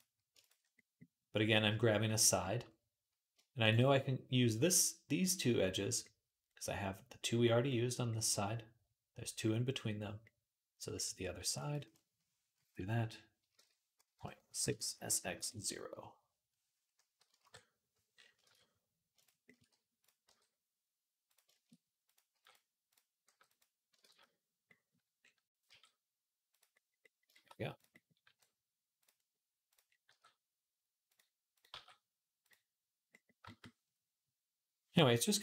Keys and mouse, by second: 11.2-20.1 drag, 11.2 e, 13.4 shift+Tab, 13.9 ., 14.6 s, 18.2 shift+Tab, 20.1 g, 21.9 click, 22.1-33.1 drag, 22.1 g, 23.0 g, 23.8 ctrl+z, 25.5 g, 28.1 g, 29.9 g, 31.5 g, 33.1-35.4 shift+middle drag.